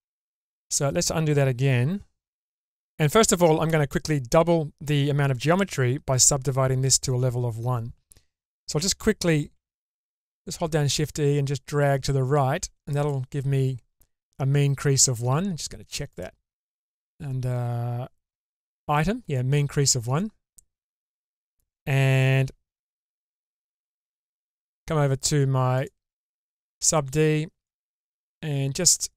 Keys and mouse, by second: 0.1 shift+click, 2.4-3.4 middle drag, 9.5 shift+e, 16.1 click, 16.9 click, 20.1-21.2 drag, 22.5 Tab, 23.9-24.4 shift+middle drag, 27.6-29.0 drag.